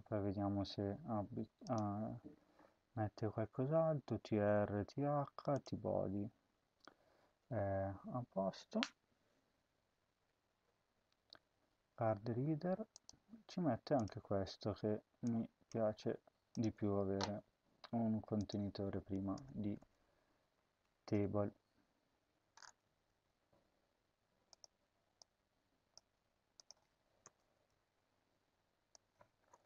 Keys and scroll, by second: 15.5 ctrl+c, 19.3 BackSpace, 19.7 Return, 19.9 Tab, 20.5 ctrl+v, 25.7 ctrl+c, 27.1 Return, 27.3 BackSpace, 27.7 ctrl+v.